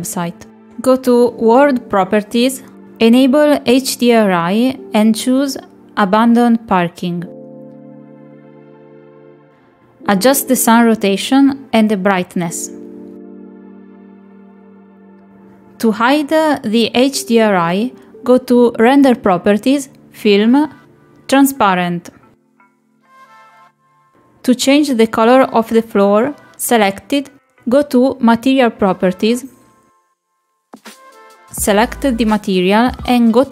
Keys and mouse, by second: 2.0 click, 3.0 click, 3.9 click, 4.5 click, 4.8 click, 5.2 click, 5.6 click, 6.2 click, 6.6 click, 8.9-11.2 drag, 11.8 click, 12.5 click, 13.2 click, 14.8 middle click, 15.8 middle click, 16.1 middle click, 16.8 middle click, 17.6 middle click, 22.7 click, 24.1 middle click, 27.3 click, 29.0 click, 31.7 click.